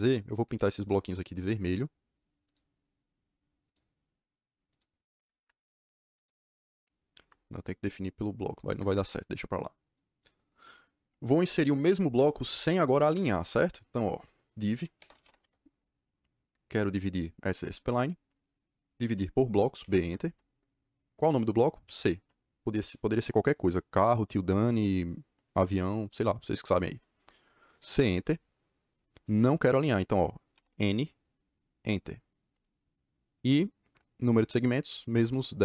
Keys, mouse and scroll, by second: 0.7 click, 2.4 click, 3.6 click, 4.6 click, 5.1 Escape, 5.3 Escape, 6.1 click, 7.1 Escape, 8.6 Escape, 8.8 Escape, 12.8 Escape, 14.7-15.6 typing, 17.5 click, 19.7 b, 19.9 Return, 21.8 c, 27.9 Return, 30.5 n, 31.7 Return, 35.1 KP_1, 35.3 KP_0.